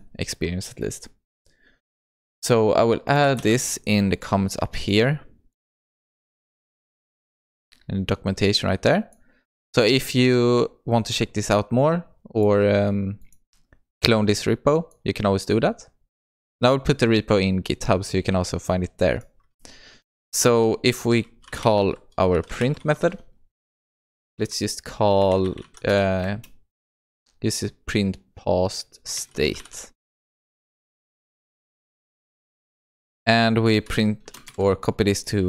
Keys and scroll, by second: 6.7 ctrl+v, 33.0 ctrl+c, 34.5 ctrl+v.